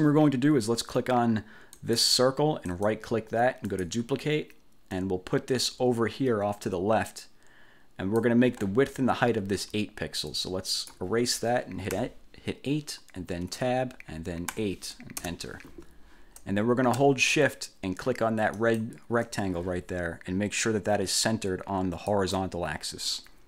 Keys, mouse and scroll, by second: 1.9 click, 2.8 right click, 3.8 click, 5.1-8.5 drag, 10.5 click, 12.1 8, 13.7 Tab, 14.7 8, 15.3 Return, 18.7 shift+click, 22.2 click.